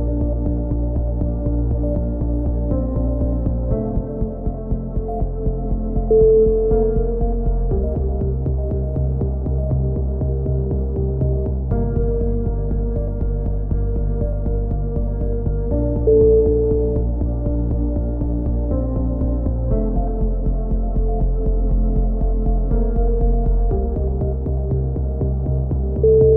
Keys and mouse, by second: 0.2-1.5 drag, 2.9 click, 3.7 middle click, 4.0-5.1 drag, 4.6 KP_7, 5.1 z, 5.9-6.9 drag, 9.3 a, 9.8-10.8 drag, 13.5-14.5 drag, 14.2 c, 15.0-16.7 drag, 17.5-18.7 drag, 23.2-24.5 middle drag, 23.7 z, 23.9 z, 24.5-26.1 drag, 26.2 alt+m.